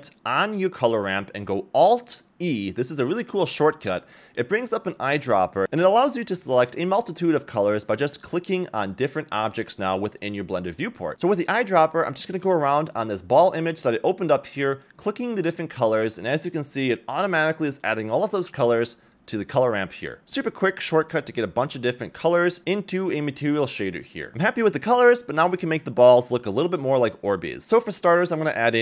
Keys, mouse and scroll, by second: 1.4 alt+e, 24.3 scroll up 3, 24.6-25.0 shift+middle drag, 25.8-27.0 middle drag, 26.2 s, 28.2 click, 28.2 middle click, 28.2 scroll down 1, 28.5 shift+a.